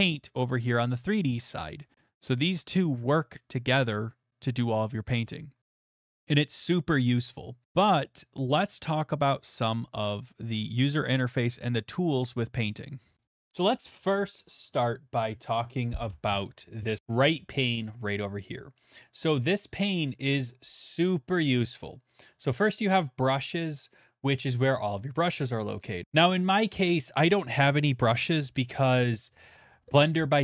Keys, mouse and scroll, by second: 22.5 click, 26.0 click.